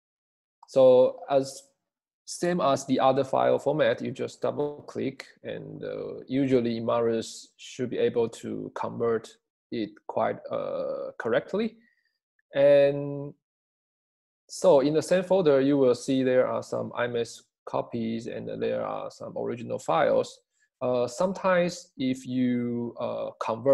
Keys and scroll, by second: 23.3 space.